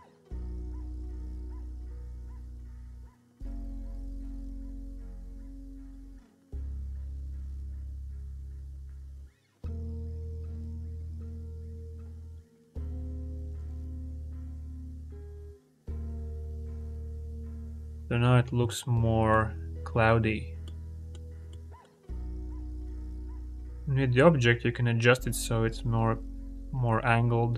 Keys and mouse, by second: 2.1 click, 3.3 ctrl+z, 3.7-5.7 drag, 6.1 ctrl+z, 7.8-11.6 drag, 12.2 click, 12.5 click, 13.4 click, 15.0 ctrl+z, 16.4-16.9 drag, 17.3 ctrl+z, 18.5-19.1 shift+middle drag, 20.5 click, 21.3 shift+middle click, 21.3-21.7 shift+drag, 22.1 click.